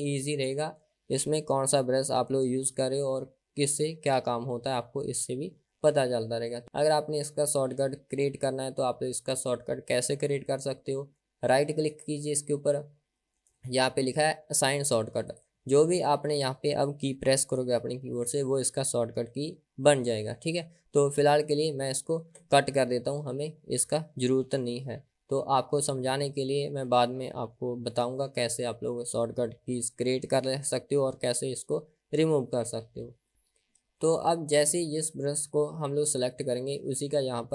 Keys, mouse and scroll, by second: 1.8 scroll down 2, 5.2-7.8 scroll up 6, 11.9-15.0 right drag, 15.0 click, 22.3-36.2 middle drag, 36.2 click.